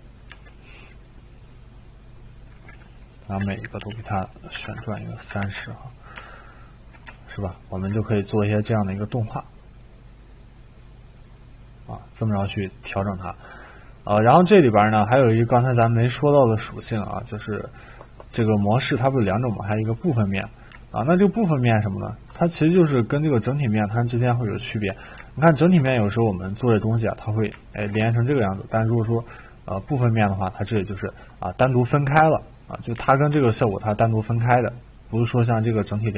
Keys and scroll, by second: 0.0-0.3 typing, 3.1-3.9 typing, 4.6 ctrl+c, 5.4 ctrl+v.